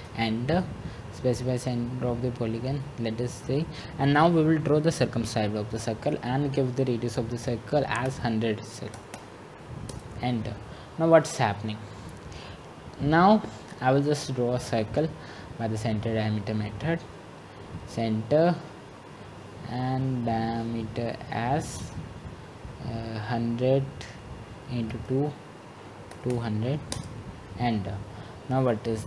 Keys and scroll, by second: 8.2-8.9 typing, 10.0-10.8 typing, 26.9-27.7 typing.